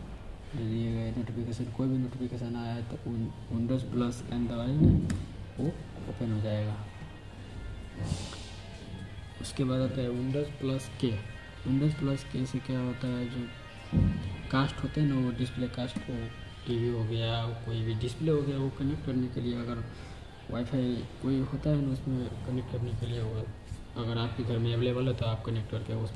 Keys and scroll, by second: 4.9 super+n, 15.8 super+k.